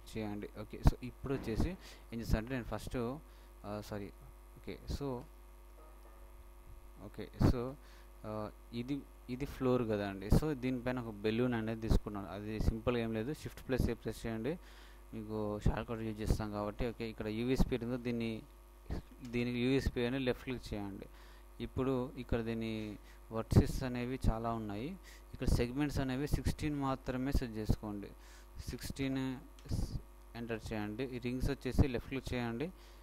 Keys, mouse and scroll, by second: 2.1-7.7 middle drag, 7.8-9.0 shift+middle drag, 23.6 z, 24.1 z, 27.6-29.6 drag.